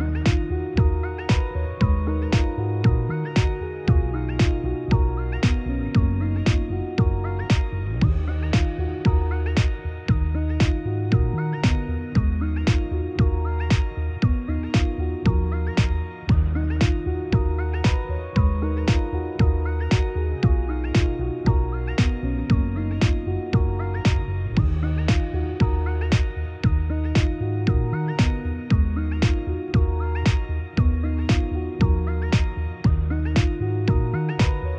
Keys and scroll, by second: 1.7 ctrl+i, 25.6 ctrl+z.